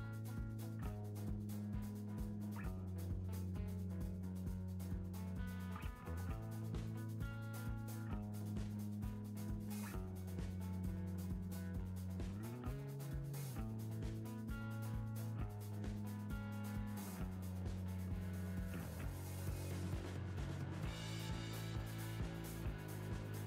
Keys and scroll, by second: 5.1 Right, 12.1 Right, 18.0 Right, 21.0 Right, 22.2 Right.